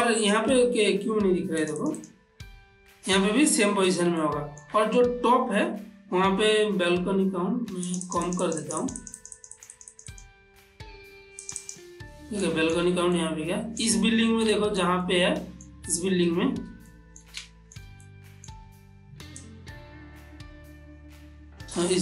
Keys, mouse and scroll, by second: 1.7 click, 4.2 click, 4.2-7.9 ctrl+middle drag, 7.9 click, 11.5 click, 12.5-14.6 ctrl+middle drag, 15.0 ctrl+middle click, 16.4 ctrl+middle click, 17.5-19.4 shift+middle drag, 19.4-22.0 shift+drag.